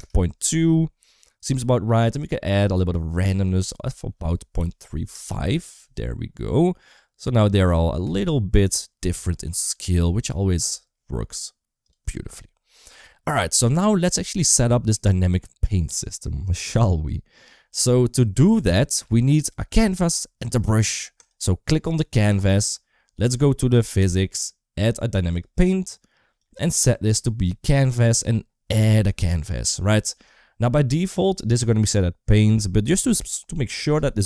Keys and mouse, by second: 2.4-5.0 drag, 7.9 space, 10.3 shift+middle click, 11.7 click, 13.4 shift+middle click, 13.7 middle click, 14.3 shift+middle click, 23.8 click, 25.1 click, 26.2 click.